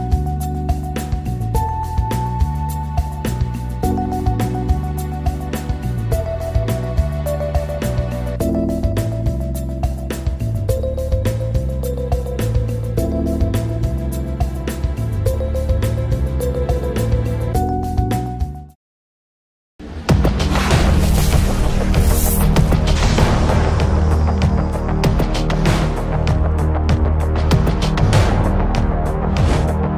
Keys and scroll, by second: 3.1 ctrl+g, 4.8 ctrl+z, 7.9 ctrl+z, 9.5 ctrl+r.